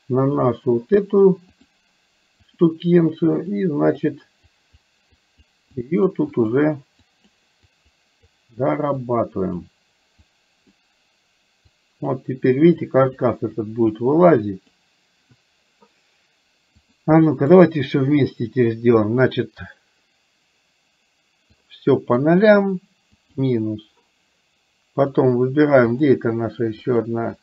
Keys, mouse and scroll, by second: 0.4 click, 1.7-2.7 drag, 3.7 click, 4.7 click, 5.3 click, 5.9 click, 6.4 click, 7.2 click, 7.8 click, 8.4 click, 9.0 click, 10.3 click, 11.8 click, 12.8 click, 13.7 click, 14.4 click, 16.9 click, 21.7 click, 25.2 click, 25.9 click, 26.8 click.